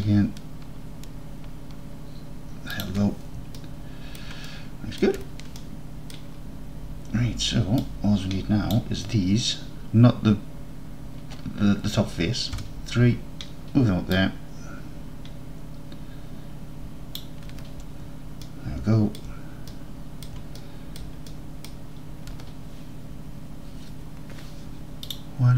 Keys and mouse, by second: 2.8 shift+click, 3.7 alt+drag, 4.0 alt+click, 4.2 alt+drag, 4.5 alt+drag, 4.8 alt+click, 5.0 alt+middle click, 8.0-8.8 drag, 12.6 KP_3, 14.3-17.2 drag, 18.5-19.2 alt+middle drag, 19.2 alt+click, 19.8-20.3 drag, 20.6 alt+click, 21.7 drag, 25.1-25.5 drag.